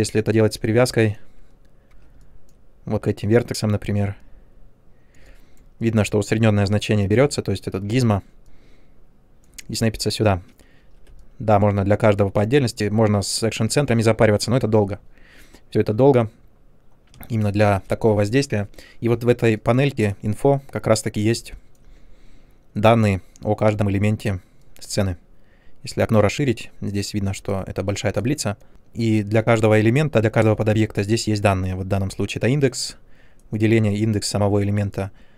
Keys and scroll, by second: 1.9 w, 10.7 ctrl+z, 17.1 space.